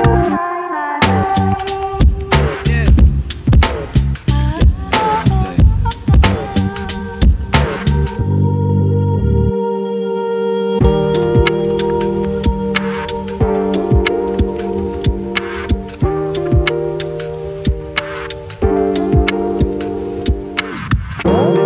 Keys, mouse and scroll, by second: 1.9-2.3 drag, 4.0-5.8 right drag, 7.1-7.7 scroll down 1, 7.7 click, 8.7 click, 9.6 click, 10.4-14.3 right drag, 17.3-17.7 drag.